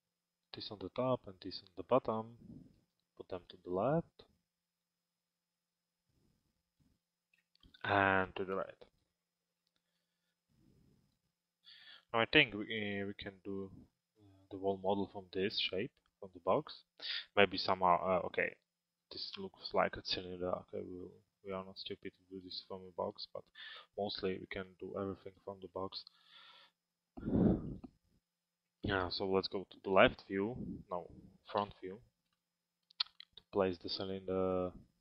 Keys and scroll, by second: 29.5 l.